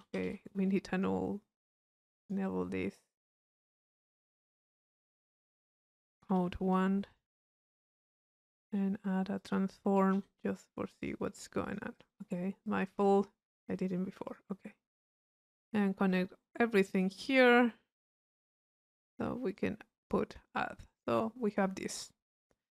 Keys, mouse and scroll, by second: 0.1 u, 1.0 click, 1.6 click, 2.2 click, 3.3 click, 3.9-5.1 drag, 7.1-8.7 drag, 8.7 right click, 9.4 click, 11.0 click, 11.7 click, 12.6 click, 14.3 click, 14.8 middle click, 15.1 click, 16.1-17.3 drag, 17.9-19.2 drag, 19.5 click, 20.0 click, 20.6 middle click, 21.2 click.